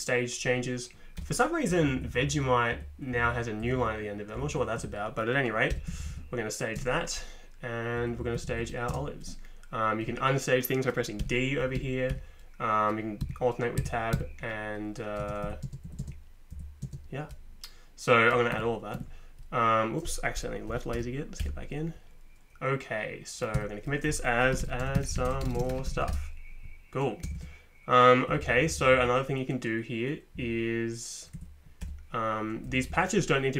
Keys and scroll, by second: 1.2 Return, 1.7 Page_Down, 1.8 Down, 2.0 Down, 2.1 Down, 2.2 Down, 2.4 Down, 3.6 Up, 3.8 Up, 4.4 Up, 4.5 Up, 4.8 Down, 5.7 v, 5.9 Down, 6.0 Down, 6.1 Down, 6.8 space, 7.8 typing, 8.0 Up, 8.2 Up, 8.3 Down, 8.9 space, 11.2-12.1 typing, 13.2 Tab, 13.8 Tab, 14.1 Tab, 15.2 space, 15.4 Down, 15.7 space, 15.8 Up, 16.5 Down, 16.5 space, 18.5 Escape, 19.0 Escape, 20.7 l, 20.9 g, 21.4 Return, 23.5-28.8 typing, 28.9 Down, 29.0 Down, 30.4 Up, 31.3 Down, 31.8 Return, 32.7 Down.